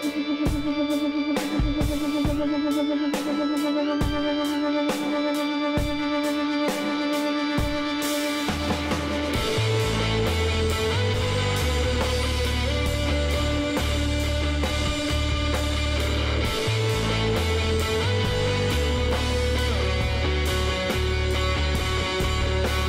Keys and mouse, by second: 0.0-1.8 drag, 2.8 b, 5.1 b, 6.8-8.7 drag, 9.5-11.3 drag, 10.3 b, 11.8-13.6 drag, 14.1-17.7 drag, 15.0 b, 17.8 b, 18.6-20.8 middle drag, 19.3 e, 20.8-22.8 drag.